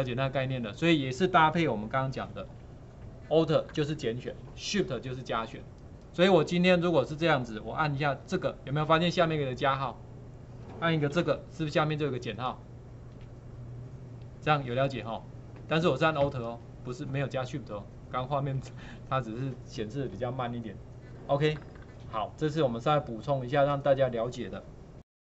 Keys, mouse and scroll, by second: 2.1 ctrl+4.